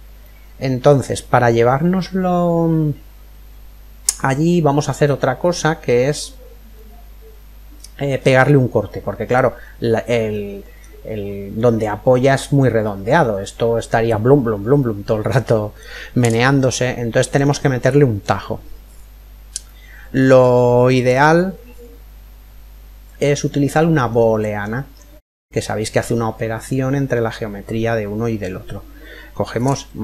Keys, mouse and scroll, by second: 1.1-3.2 middle drag, 5.0-6.4 scroll up 1, 6.4-8.1 middle drag, 8.1-8.5 scroll up 1, 8.5-11.8 middle drag, 12.5-14.1 middle drag, 14.5-18.3 middle drag, 19.2-21.2 middle drag, 23.0-24.8 middle drag, 24.8-26.5 scroll down 1, 26.5-26.8 scroll down 1.